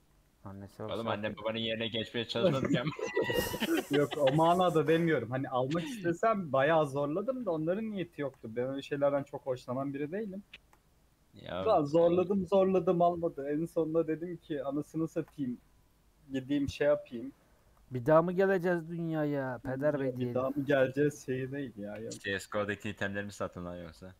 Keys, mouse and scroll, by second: 1.6 scroll down 1, 1.7 middle click, 2.0 scroll up 1, 3.2 click, 5.3 z, 6.5 middle click, 7.3 click, 7.8 shift+click, 8.4 g, 9.4 shift+click, 10.3 shift+click, 11.1-12.2 middle drag, 12.2 scroll up 1, 13.4 shift+Left, 14.2 shift+Left, 14.7 shift+Left, 15.4 g, 16.5-17.6 middle drag, 17.6 ctrl+j, 19.0 Tab, 19.9 Tab, 20.3 Tab, 20.6 a, 21.0 Tab, 21.3 Tab, 22.0 shift+d.